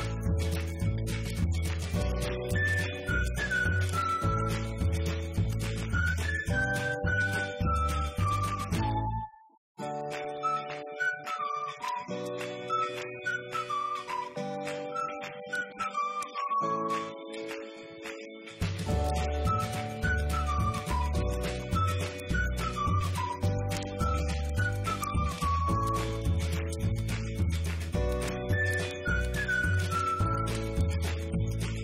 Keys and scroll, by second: 0.9 Right, 1.4 ctrl+Up, 1.9 Up, 3.7 ctrl+Down, 7.7 Delete, 8.7 Right, 9.4 ctrl+Up, 11.3 Up, 12.7 Down, 13.5 ctrl+Down, 15.5 ctrl+Up, 16.1 Up, 17.6 ctrl+Down, 18.6 Delete, 30.7 Right, 31.4 shift+Right.